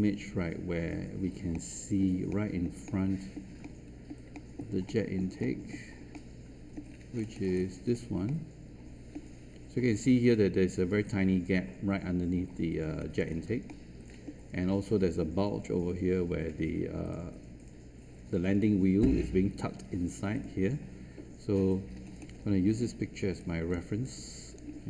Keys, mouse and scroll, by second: 6.8 scroll up 1, 8.2 middle click, 12.8-13.2 scroll down 1, 13.2-13.6 scroll up 1, 13.6-15.1 middle drag, 21.8 scroll down 1, 22.0-22.3 scroll up 1, 22.3-23.2 scroll down 1, 23.3 click.